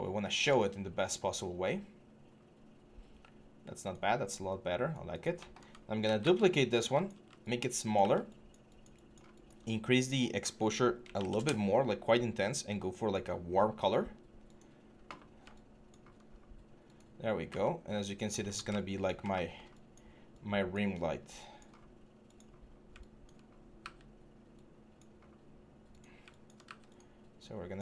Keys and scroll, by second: 5.8 ctrl+d, 6.0-7.7 typing, 10.8 typing, 11.1 Return, 17.2 w, 23.5 w, 26.4 w.